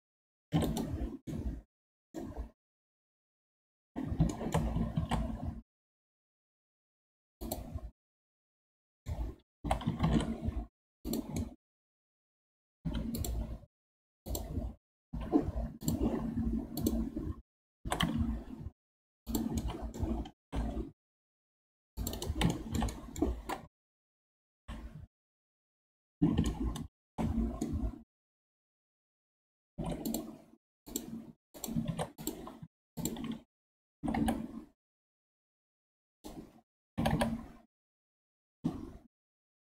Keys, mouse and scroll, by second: 1.3-2.3 middle drag, 2.3-2.7 scroll down 1, 2.7-5.0 middle drag, 5.0 shift+a, 8.4-9.6 middle drag, 9.6 g, 11.4 middle click, 12.2-12.8 scroll up 4, 12.8 2, 13.2 click, 13.4-14.3 scroll down 2, 14.3 click, 15.1 2, 15.8-16.9 drag, 17.8 e, 19.6 middle click, 20.3 ctrl+r, 22.5-23.8 shift+middle drag, 23.8 KP_3, 24.5 KP_1, 25.9-26.5 scroll up 6, 26.5-29.7 shift+middle drag, 29.7 ctrl+Tab, 30.9 click, 31.5 click, 31.9 ctrl+Tab, 32.6 2, 33.0 alt+click, 34.0 g, 37.0 g.